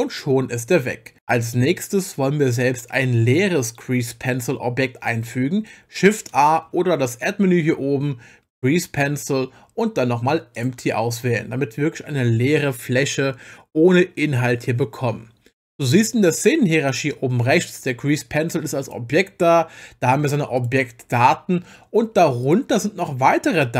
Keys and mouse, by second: 18.8 click, 20.6 click, 22.4 click.